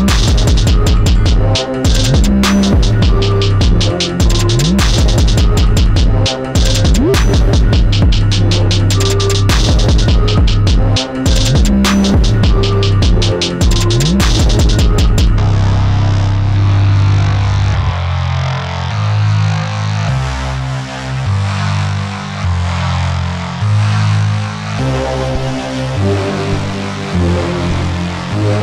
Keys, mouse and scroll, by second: 1.4-2.5 drag, 2.5 scroll down 2, 2.8-5.9 middle drag, 6.3 KP_1, 7.1-7.7 drag, 8.3-11.3 drag, 14.2 KP_7, 15.9 s, 20.5 click, 23.6 click, 24.7-27.3 drag, 27.8-28.6 drag.